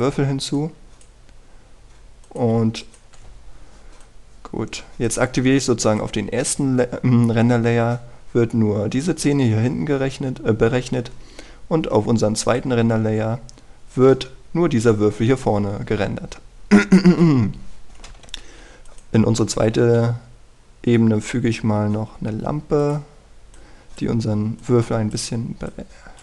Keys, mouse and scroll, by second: 3.7 shift+click, 4.9-6.3 drag, 17.7-18.1 scroll down 1, 18.1-19.8 scroll up 1, 19.8 click, 20.7 shift+a, 23.7 click.